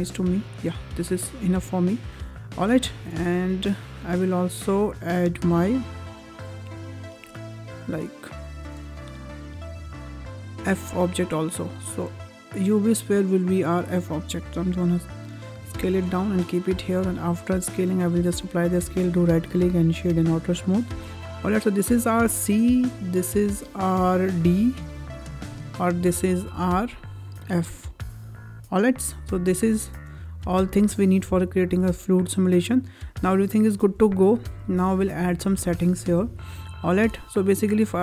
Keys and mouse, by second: 0.6 shift+middle drag, 0.9-1.9 middle drag, 2.9 `, 5.0 `, 6.4 `, 8.3 shift+middle drag, 8.7 shift+a, 13.2 click, 14.3 s, 16.1 click, 16.8 ctrl+a, 18.3 click, 19.0-20.1 right drag, 20.7 shift+middle drag, 22.7-24.1 drag, 24.3 click, 24.8 click, 26.3 click, 27.1 click, 27.6 click, 28.2 click, 29.1 click, 31.3-33.6 ctrl+drag, 34.5 click, 35.6 shift+middle drag.